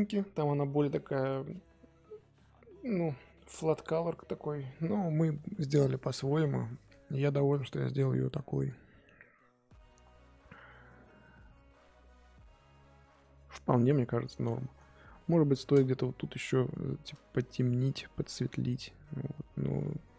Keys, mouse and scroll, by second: 6.1-11.6 middle drag, 14.8-15.1 scroll up 1, 15.1-17.5 middle drag, 17.5-18.2 scroll up 1, 19.3-19.8 scroll down 1.